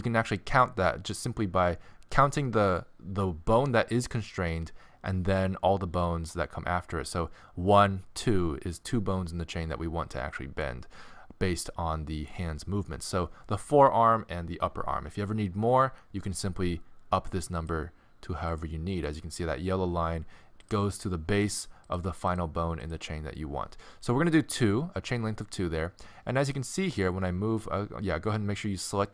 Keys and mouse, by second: 17.6-21.9 drag, 21.9-29.1 middle drag.